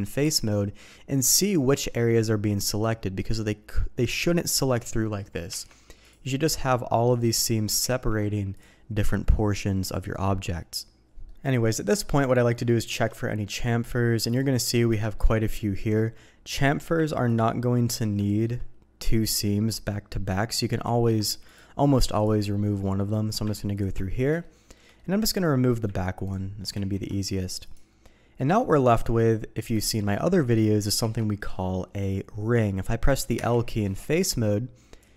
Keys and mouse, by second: 0.2 click, 1.6 click, 2.5 click, 5.0 click, 5.5 Tab, 6.0 click, 7.1 click, 7.8 ctrl+e, 9.7 click, 11.3 middle click, 11.6 middle click, 12.6 shift+click, 12.7 shift+middle click, 13.5 middle click, 14.2 click, 14.5 middle click, 15.0 shift+middle click, 15.7 middle click, 17.8 middle click, 18.3 shift+middle click, 22.1 click, 22.5 middle click, 22.8 click, 23.7 ctrl+click, 24.4 shift+middle click, 24.9 middle click, 26.2 ctrl+click, 26.7 ctrl+e, 28.4 middle click, 28.9 Tab, 29.2 middle click, 29.8 shift+middle click, 30.1 middle click, 31.0 alt+a, 31.4 middle click, 33.4 l, 33.9 middle click, 35.0 click.